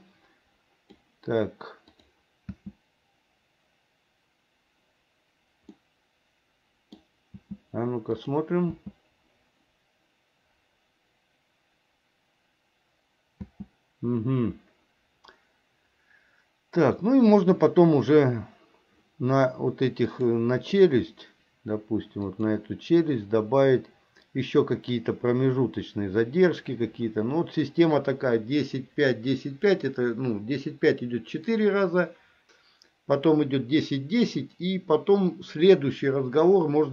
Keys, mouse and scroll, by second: 2.0 click, 2.6 space, 5.9-7.1 middle drag, 7.5 space, 8.3 click, 8.8 space, 13.5 space, 20.3 click, 22.4 click.